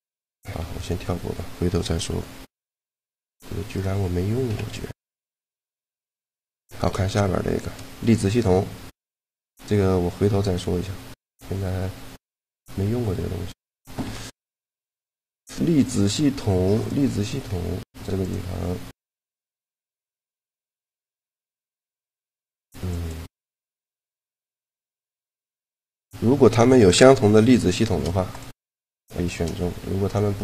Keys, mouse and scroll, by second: 0.4 x, 3.6 right click, 4.3-5.3 drag, 4.3 KP_Decimal, 5.5-6.8 drag, 6.8 shift+l, 14.0 shift+l, 16.1 click, 16.7-18.3 right drag, 18.0-20.7 drag, 20.1-21.9 right drag, 22.7-25.6 drag, 25.9-27.6 right drag, 27.2 shift+l, 29.9-30.4 right drag.